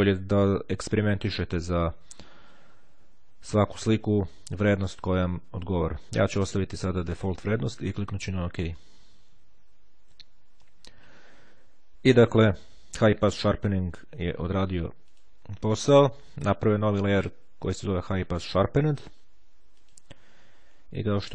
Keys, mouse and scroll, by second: 7.9-9.1 drag, 14.2-15.8 drag, 19.5 click.